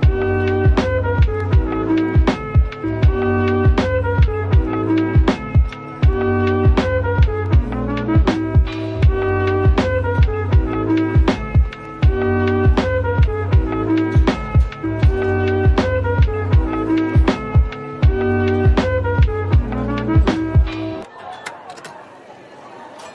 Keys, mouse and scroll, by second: 0.3 ctrl+l, 1.2 typing, 2.6 typing, 4.4 typing, 5.9 right click, 8.1 Tab, 9.4 double click, 9.9 middle click, 10.3 Tab, 12.3 typing, 14.5 shift+click, 14.7 shift+double click, 15.9 shift+click, 16.3 shift+double click, 16.9 shift+click, 17.4 shift+click, 18.2 ctrl+l, 19.4-20.8 typing, 22.8 typing.